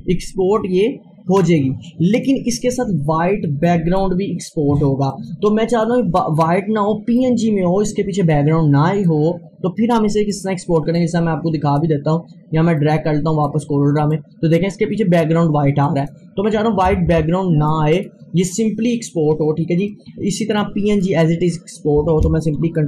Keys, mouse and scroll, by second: 1.4-15.9 drag, 17.1 Delete, 17.7-20.5 drag, 20.0 scroll down 1, 20.6-22.8 drag.